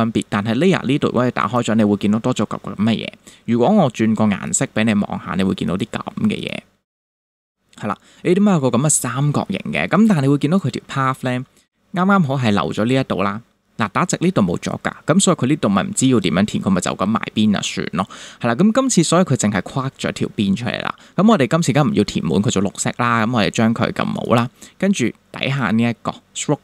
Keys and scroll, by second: 9.9 space.